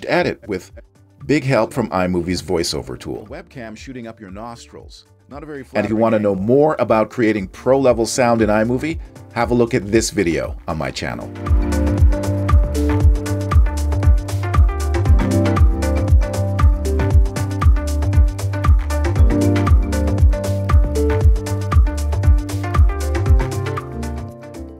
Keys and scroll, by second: 0.5 space.